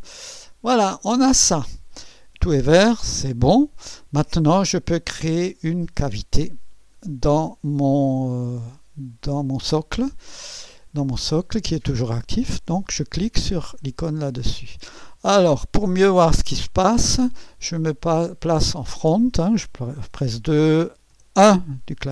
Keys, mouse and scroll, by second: 3.1 click, 4.3 click, 5.2 scroll up 1, 14.1 click, 18.7 click, 20.0 2, 21.1 KP_1, 21.1 1.